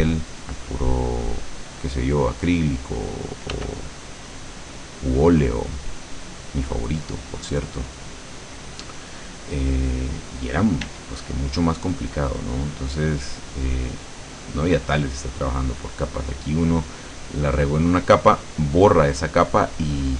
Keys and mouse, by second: 3.6 click, 3.6 f, 4.2-7.2 drag, 10.9 d, 12.0-19.8 drag.